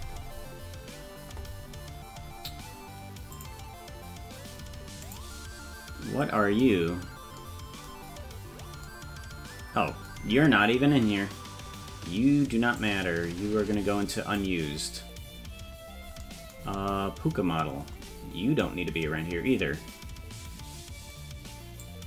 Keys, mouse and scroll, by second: 3.3 click, 5.0 click, 6.7-7.4 scroll down 1, 7.4 scroll down 3, 8.1-9.7 scroll down 4, 12.8-14.5 drag, 13.3-13.8 scroll down 4, 17.8-18.7 scroll up 5, 19.2-19.6 scroll down 2, 19.6-21.2 scroll up 1, 21.2-21.8 scroll up 1, 21.8-22.0 drag.